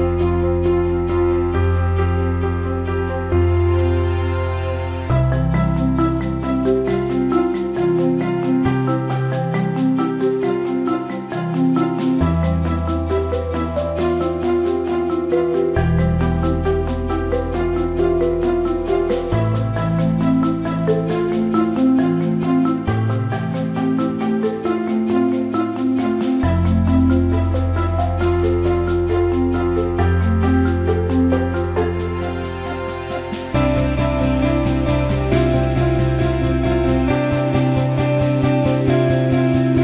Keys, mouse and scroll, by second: 0.0 shift+click, 2.6 click, 3.5-11.1 drag, 11.6 alt+shift+middle click, 12.5-13.6 drag, 13.6 m, 15.1 click, 15.3 m, 17.2 ctrl+z, 19.7 click, 21.7 m, 25.4 click, 25.8 shift+click, 26.7 m, 35.5 shift+click, 35.7 middle click, 36.5 ctrl+b, 36.8-38.0 middle drag, 38.5-39.8 middle drag.